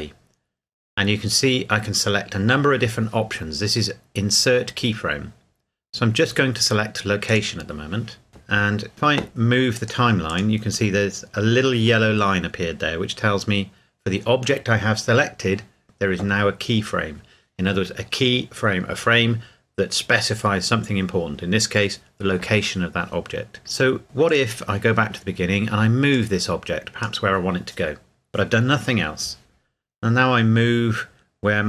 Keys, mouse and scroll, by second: 7.3 click, 9.7 click, 10.7 click, 24.3 click.